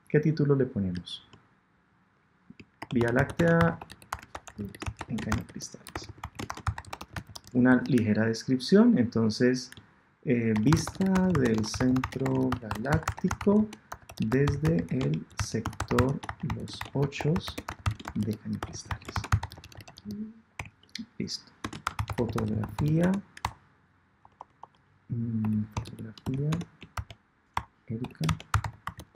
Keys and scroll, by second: 7.6 Tab, 23.4 BackSpace, 27.5 shift+BackSpace, 28.1 BackSpace.